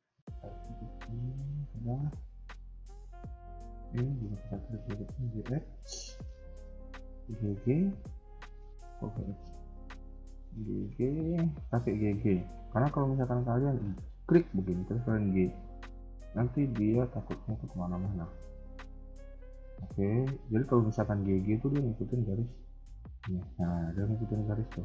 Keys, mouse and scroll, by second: 1.4-1.9 scroll down 2, 1.9 scroll up 1, 2.3 shift+middle click, 2.6 scroll up 1, 3.8 click, 4.4 ctrl+click, 4.8 g, 6.2 click, 6.8 ctrl+click, 7.2 g, 8.6 click, 9.9 g, 13.4 click, 14.9 click, 14.9 g, 17.8-18.2 scroll down 2, 18.2 middle click, 19.8 scroll up 1, 20.9 click, 21.4 g.